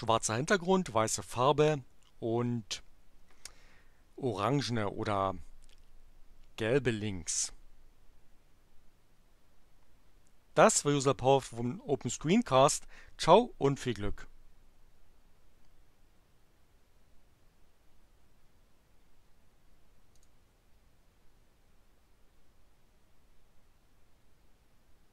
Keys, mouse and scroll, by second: 20.1 click.